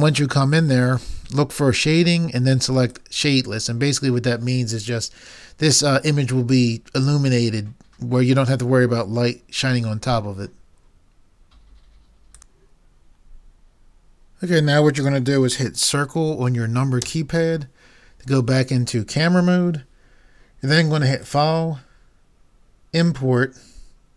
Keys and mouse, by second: 3.0-4.7 drag, 17.0 KP_0.